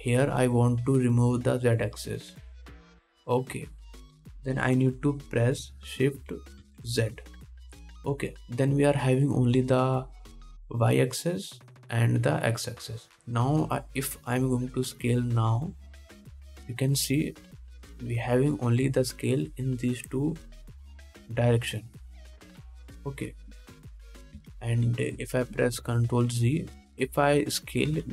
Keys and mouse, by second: 25.7 ctrl+z, 26.1 ctrl+z.